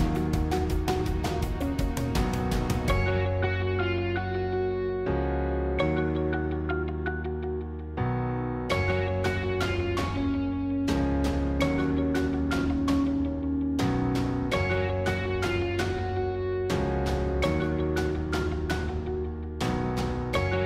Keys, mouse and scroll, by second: 0.3 g, 2.2 click, 2.5 middle click, 3.4 scroll up 1, 3.7-5.2 middle drag, 5.2-5.9 scroll up 2, 5.9 scroll up 1, 5.9 middle click, 6.7-7.0 scroll down 3, 7.0-10.6 middle drag, 10.6 click, 11.3-15.5 middle drag, 15.5 shift+click, 18.5 s.